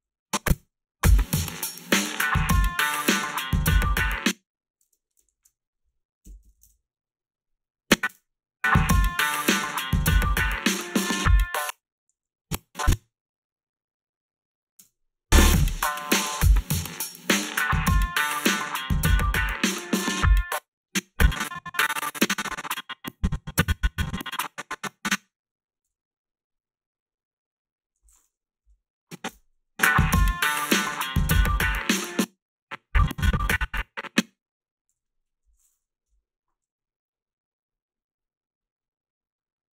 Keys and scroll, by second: 0.5 space, 4.0 space, 5.3 alt+shift+s, 6.0-7.0 typing, 8.1 space, 11.4 space, 11.7 h, 12.1 a, 14.8 space, 20.3 space, 25.9 g, 28.6 Delete, 29.2 space, 32.0 space, 34.9 g, 36.1 Delete.